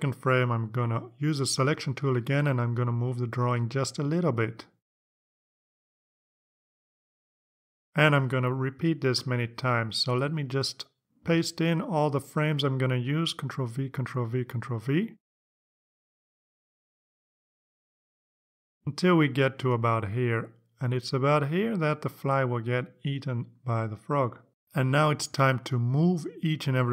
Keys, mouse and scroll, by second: 2.2 click, 4.5 click, 6.2 click, 11.9 click, 14.2 ctrl+v, 14.9 ctrl+click, 15.3 ctrl+v, 15.9 Down, 16.3 ctrl+v, 16.5 ctrl+Down, 16.6 ctrl+v, 16.8 ctrl+Down, 16.9 ctrl+v, 17.3 ctrl+Down, 17.5 ctrl+v, 17.7 ctrl+Down, 18.3 Up, 23.9 Up, 25.6 Down, 26.6 Down.